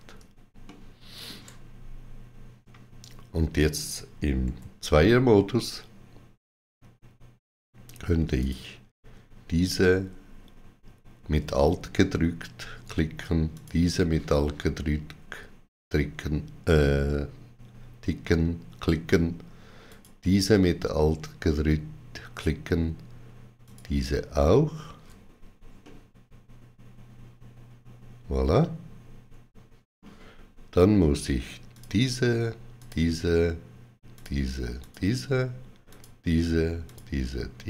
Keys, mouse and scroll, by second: 0.5 shift+middle click, 4.3 2, 8.2 alt+click, 13.4 alt+shift+click, 19.8 alt+shift+click, 23.5 alt+shift+click, 25.7 middle click, 31.6 alt+shift+click, 32.7 shift+click.